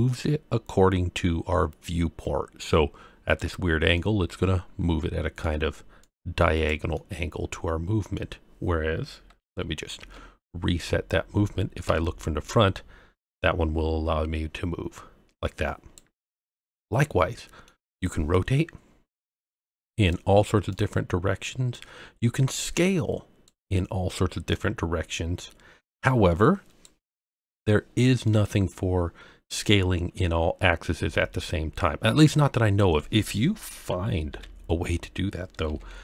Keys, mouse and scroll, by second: 3.5-3.9 scroll down 2, 3.9-5.4 middle drag, 6.0 click, 6.9-8.1 middle drag, 9.9 alt+g, 10.9-11.8 scroll up 2, 11.8 KP_1, 13.3 click, 16.3-16.7 scroll down 2, 16.7-17.6 middle drag, 18.3 click, 20.7 click, 22.6 click, 24.5 click, 27.4-28.0 scroll up 2, 28.2-30.1 middle drag, 34.3 alt+s, 35.6 alt+g.